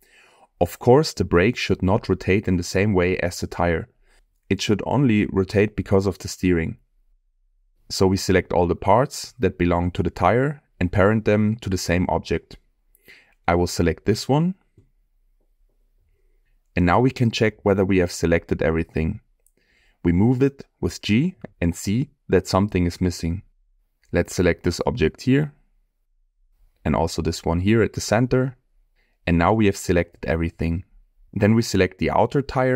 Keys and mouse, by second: 4.0-4.5 middle drag, 6.1-6.7 middle drag, 8.9-9.2 shift+middle drag, 10.1-10.8 middle drag, 11.2 click, 13.4 shift+click, 13.8 shift+click, 14.6 middle click, 15.5-16.9 shift+drag, 17.6 shift+click, 19.4 shift+click, 20.9 g, 22.6 click, 23.1 middle click, 24.2 shift+click, 26.1 middle click, 26.9 drag, 29.2 g, 30.5 click, 31.0-31.4 middle drag.